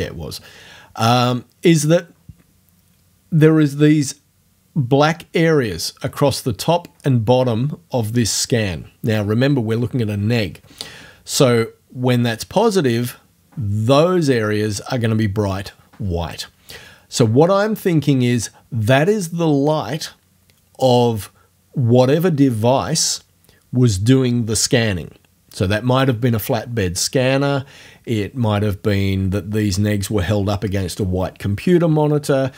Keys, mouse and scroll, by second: 0.0-0.3 scroll down 2, 1.8 click.